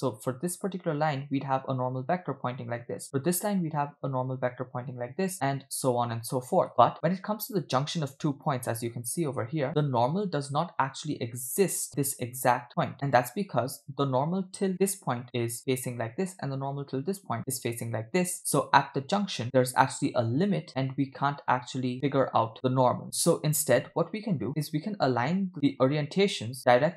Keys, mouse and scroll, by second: 1.1-2.2 drag, 3.9 click, 4.6 click, 5.4 click, 6.0 click, 6.3 click, 11.1 click, 12.4-12.9 scroll up 4, 12.9 shift+middle click, 15.2 click, 17.4 click, 18.3 click, 21.5 click, 21.7 click, 21.8 click, 22.3 click, 24.3-24.7 scroll down 2, 25.5 middle click.